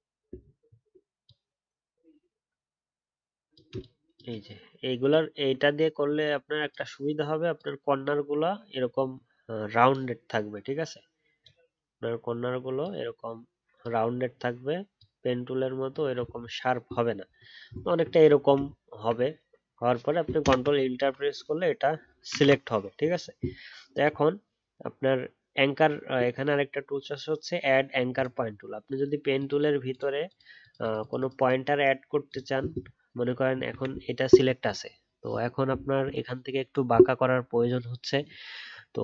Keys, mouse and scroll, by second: 0.3-0.7 alt+scroll up 3, 16.4-16.9 alt+scroll down 1, 17.8-18.5 alt+scroll up 1, 18.5-20.4 alt+scroll down 1, 20.4 ctrl+Return, 22.1 ctrl+d, 32.8-36.0 alt+scroll up 1.